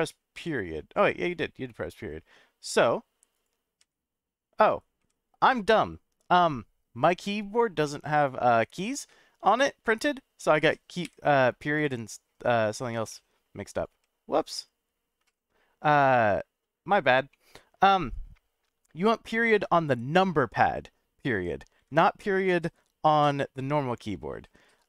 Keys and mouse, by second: 0.3 ., 1.7-2.4 middle drag, 3.3 click, 3.8 ., 5.0 /, 7.8-8.7 middle drag, 11.0 /, 11.7 /, 13.1-13.5 middle drag, 13.9 /, 14.5 /, 15.2 /, 15.9 /, 17.3-17.8 middle drag, 19.5 KP_Decimal.